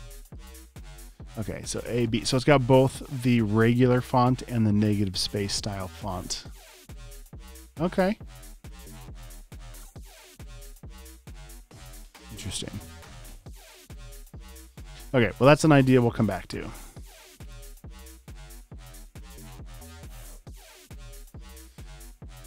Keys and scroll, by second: 2.7 typing.